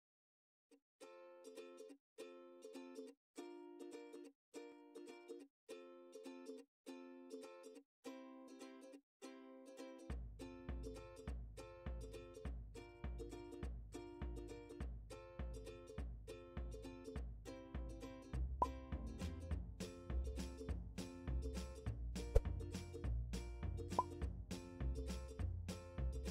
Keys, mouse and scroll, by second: 2.7 KP_1, 8.3 KP_5, 19.5 click, 21.1 g, 22.2 right click, 24.6 click.